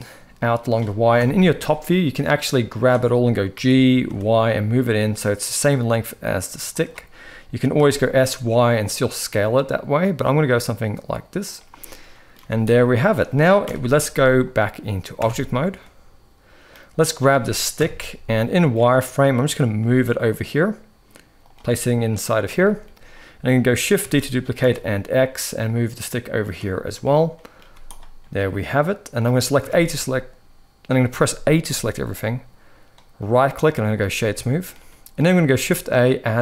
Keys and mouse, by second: 0.9 KP_7, 2.4 click, 3.3 g, 7.4 s, 11.6 middle click, 12.1 z, 13.3 KP_1, 14.9 Tab, 15.5-16.4 middle drag, 16.8 click, 17.5 KP_1, 18.0 z, 19.0 shift+middle drag, 19.5 g, 22.3 shift+middle click, 23.7 shift+d, 27.1 middle drag, 27.3 z, 28.1-28.9 middle drag, 29.3 a, 32.9-33.7 right drag, 34.1-34.4 shift+middle drag, 34.7 middle click, 35.2 shift+a.